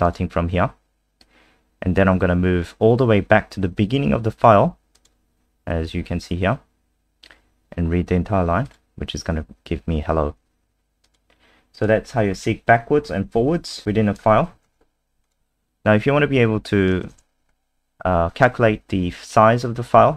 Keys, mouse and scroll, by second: 12.2-12.9 scroll down 1, 12.9-13.3 scroll down 1, 13.5 scroll down 2, 13.8 click, 14.7 ctrl+c, 15.2 click, 17.1 ctrl+v, 17.5-18.3 scroll up 2.